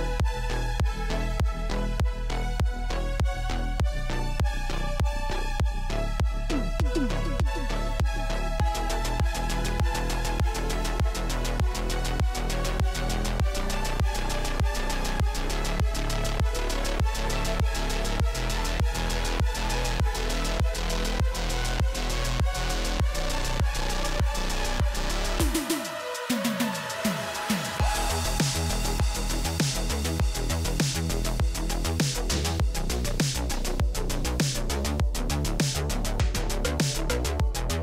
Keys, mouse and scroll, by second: 0.6 click, 0.6-0.9 scroll, 0.9 click, 1.8 click, 5.8 click, 6.4 click, 7.5 click, 8.6 click, 9.0 click, 9.5 click, 10.6 click, 11.8 click, 12.9 click, 13.6 click, 14.3 click, 14.9 click, 17.0 click, 18.6 ctrl+z, 19.1 click, 20.5 click, 20.8 click, 23.6 click, 24.8 click, 27.7 click, 28.3-29.8 typing, 30.8 Tab, 30.9-31.7 typing, 34.1 click, 34.8 scroll.